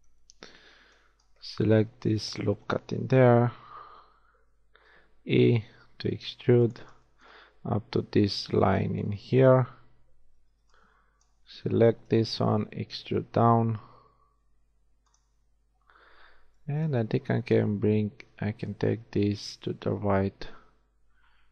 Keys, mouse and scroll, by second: 0.0 z, 0.3 b, 4.4 e, 10.3 shift+a, 10.6 b, 12.5 e, 15.5 a, 16.7 b, 18.7-19.9 drag.